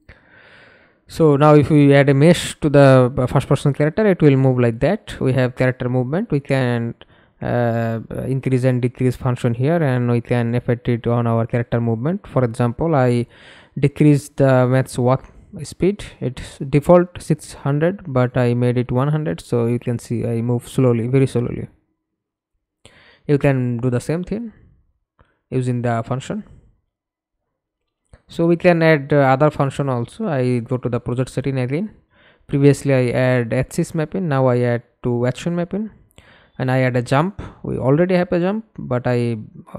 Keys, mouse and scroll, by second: 9.9-10.9 typing, 13.9 middle click, 14.8 F11, 15.3 alt+p, 16.7-23.9 w, 24.7 s, 25.1 a, 26.0 Escape, 26.6 middle click, 27.4 F11, 29.4-33.5 scroll up 18, 35.5-37.2 typing, 37.6 Return.